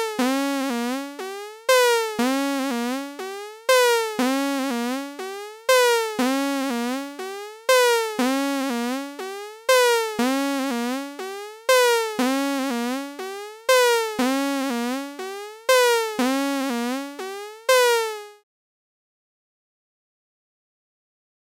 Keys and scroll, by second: 4.1 super+Tab, 8.1 super+Tab, 10.4 super+Tab, 12.5 super+Tab, 15.7 super+Tab.